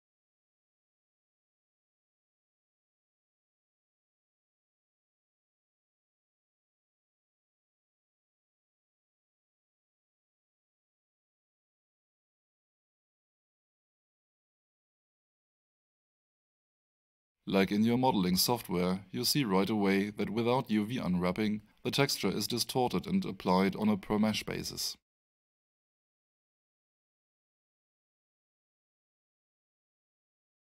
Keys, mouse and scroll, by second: 1.2 click, 8.6 click, 14.7 click, 17.8 alt+middle click, 19.1 alt+right click, 20.9 click, 21.7 alt+middle click, 25.9 alt+middle click, 27.1 alt+right click, 28.9 alt+click.